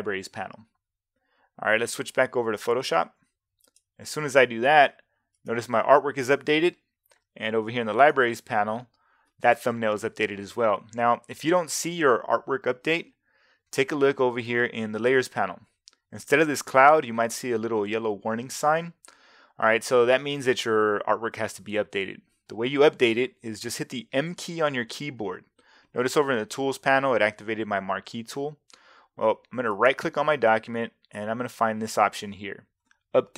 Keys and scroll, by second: 24.2 m.